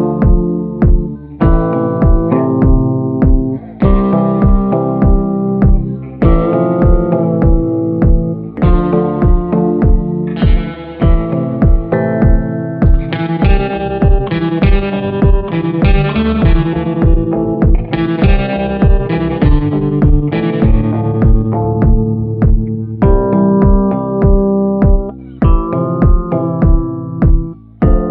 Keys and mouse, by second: 0.6-1.6 middle drag, 1.7-3.4 middle drag, 3.7 middle click, 4.8 middle click, 5.3-6.8 shift+middle drag, 7.0 shift+middle click, 11.6 shift+middle click, 13.1-14.3 middle drag, 16.8 click, 23.1 [, 23.4 [, 23.5 [, 23.5 click, 24.3 ctrl+z, 24.7 click, 25.9 ctrl+z, 26.3 click, 26.8 ctrl+z, 27.1 click, 27.8 click.